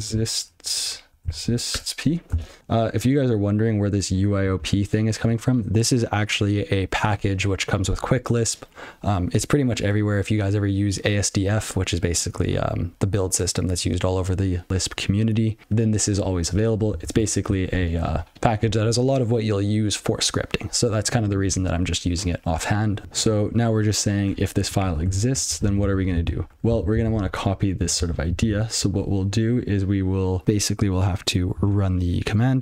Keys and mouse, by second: 0.0-2.3 typing, 2.0 Tab, 5.7 click, 17.1-18.5 ctrl+f, 23.0 ctrl+alt+space, 26.4 alt+j, 27.6 ctrl+f, 28.1 ctrl+p, 29.1 ctrl+b, 32.0 (.